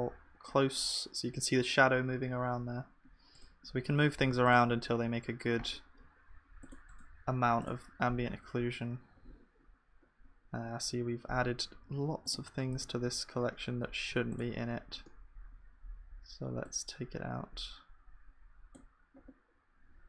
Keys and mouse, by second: 4.2 ctrl+s, 7.7-8.8 middle drag, 8.8-11.5 drag, 14.4-19.7 drag.